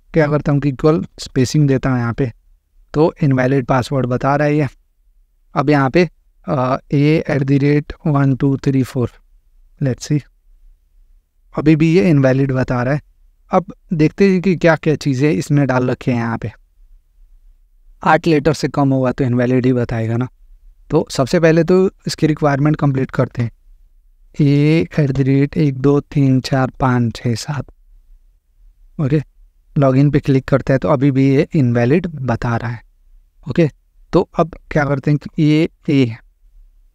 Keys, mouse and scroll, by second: 0.4 click, 0.9 space, 1.1 space, 1.3 space, 1.6 space, 2.0 click, 3.4 click, 4.4 BackSpace, 4.5 BackSpace, 4.7 BackSpace, 5.1 BackSpace, 6.4-9.3 typing, 10.4-11.2 scroll up 2, 11.2 scroll up 1, 12.7-13.8 scroll up 2, 13.8-14.1 scroll up 1, 20.1 click, 21.0 BackSpace, 21.2 BackSpace, 21.4 BackSpace, 23.2-27.7 typing, 29.2 click, 33.6 click, 35.2 Right, 35.6 a.